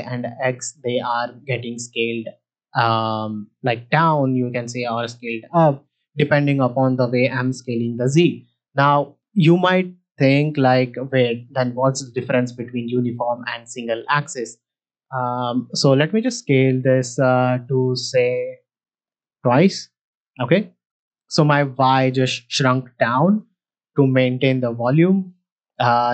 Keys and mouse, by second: 11.4-13.7 drag, 15.4 s, 15.5 z, 17.7-19.0 drag, 20.0 middle click, 20.6 middle click.